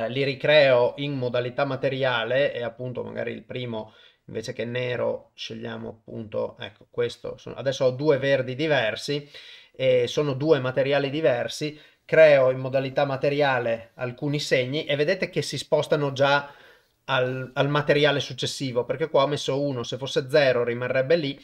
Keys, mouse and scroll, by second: 2.8 click, 12.7 click, 13.3 click, 13.8 click, 14.3 click, 14.8 click, 15.4 click, 16.0 click, 16.6 click, 17.3 click, 21.3 click.